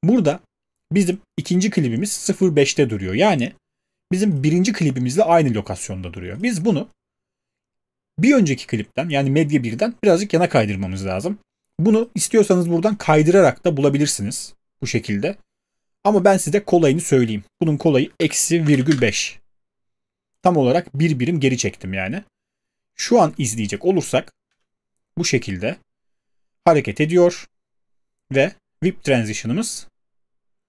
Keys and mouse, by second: 18.2-19.1 typing, 24.5 space.